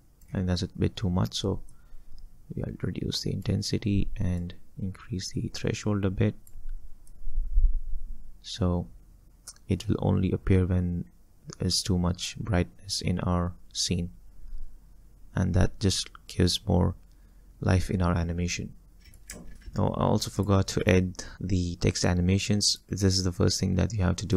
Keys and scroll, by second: 19.4 space.